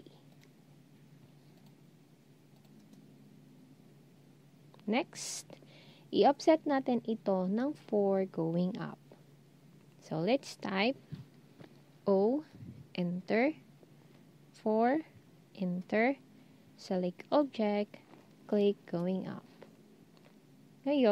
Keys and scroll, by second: 12.2 0, 14.7 4.